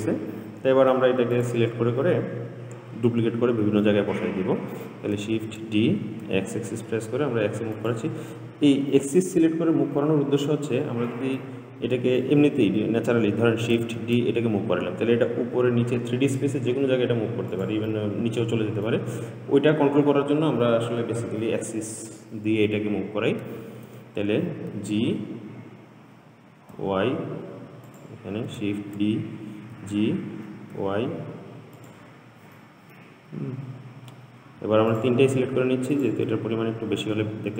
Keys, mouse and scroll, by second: 0.1-1.6 middle drag, 1.6 click, 3.6-4.1 scroll down 3, 4.1-5.6 middle drag, 5.6 shift+d, 10.2-14.2 middle drag, 14.2 shift+d, 18.1-21.3 middle drag, 23.8 ctrl+z, 24.9 g, 29.0 shift+d, 32.8 middle click, 33.5-34.5 scroll down 3, 34.5-35.1 scroll down 1, 35.1 shift+click, 36.2 shift+click.